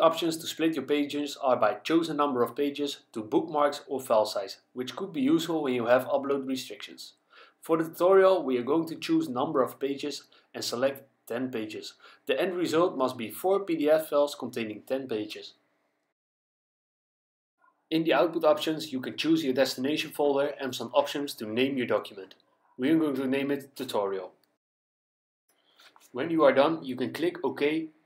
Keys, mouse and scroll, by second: 0.1 click, 10.5 click, 11.7 click, 13.8 KP_1, 14.1 KP_0, 16.8 click, 21.1 click, 22.5-24.2 typing.